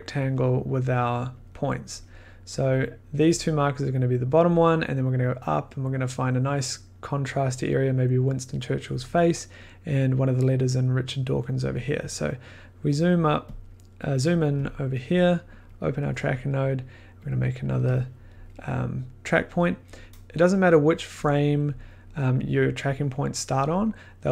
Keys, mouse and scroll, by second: 0.2 click, 0.9 click, 1.4 click, 2.0 click, 2.6 click, 3.3 click, 3.9 click, 4.5-9.6 drag, 13.0 click, 13.0 scroll, 13.9 middle click, 14.7 click, 14.7 middle click, 15.6 click, 15.7 click, 17.2 click, 18.3 scroll, 20.0 click.